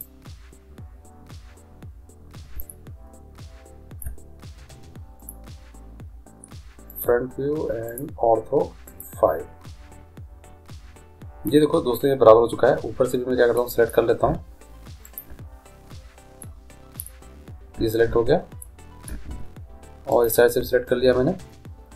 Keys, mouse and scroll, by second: 1.3-3.4 middle drag, 9.0 click, 9.8-13.5 middle drag, 15.0-16.7 right drag, 16.7 middle click, 20.1-21.5 right drag, 21.5 click.